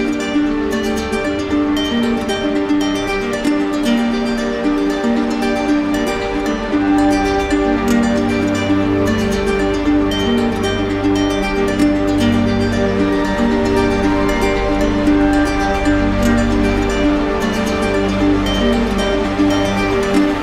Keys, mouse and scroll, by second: 5.1-6.1 drag, 7.9 click, 8.4-10.9 drag, 16.4 click, 19.8 click.